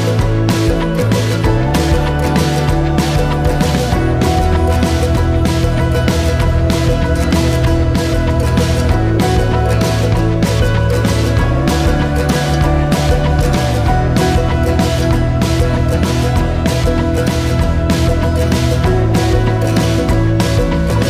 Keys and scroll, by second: 1.9 ctrl+s.